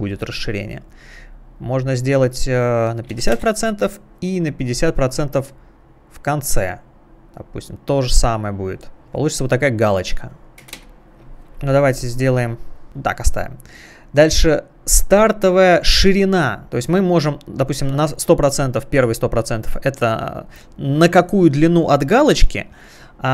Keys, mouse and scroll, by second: 1.6 click, 1.9 click, 2.1 click, 2.9-3.7 typing, 5.8 click, 9.0 click, 10.5 click, 10.7 0, 10.8 Return, 17.4 click, 18.4 click.